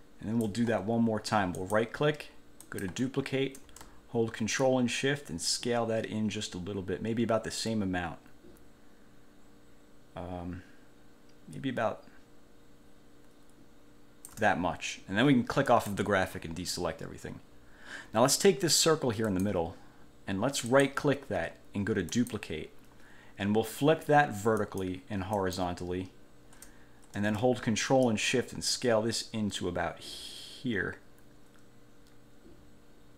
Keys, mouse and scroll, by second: 1.8 click, 2.9 click, 4.8-14.7 ctrl+shift+drag, 15.9 click, 19.5 click, 20.9 click, 22.3 click, 24.8 click, 25.5 click, 28.2-33.1 ctrl+shift+drag.